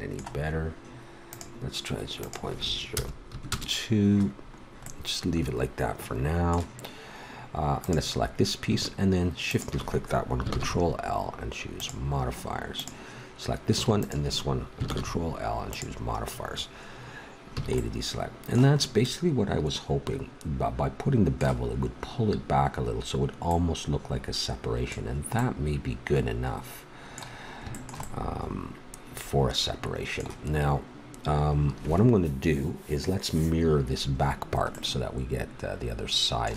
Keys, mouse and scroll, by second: 2.8 click, 4.6-6.3 middle drag, 7.8-11.3 drag, 10.5 ctrl+l, 12.7-13.7 drag, 14.8 ctrl+l, 17.5 a, 19.2-20.6 middle drag, 23.5 middle click, 26.6-29.9 middle drag, 34.7 middle click.